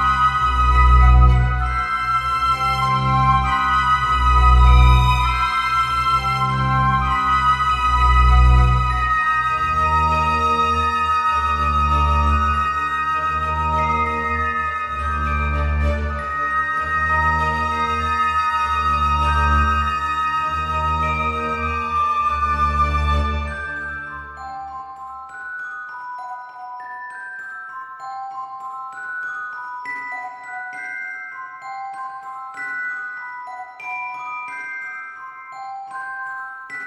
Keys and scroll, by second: 3.4 ctrl+z, 34.8 alt+x.